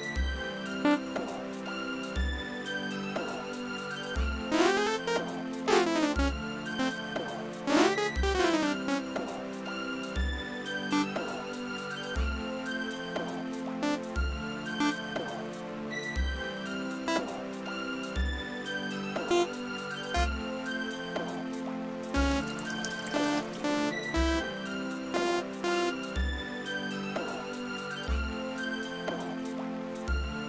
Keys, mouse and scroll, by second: 0.8 click, 4.4-9.6 drag, 10.8 click, 13.8 click, 14.7 click, 17.0 click, 19.2 click, 20.0 click, 20.5-22.0 drag, 22.0 space, 26.6 space, 28.8-30.2 drag.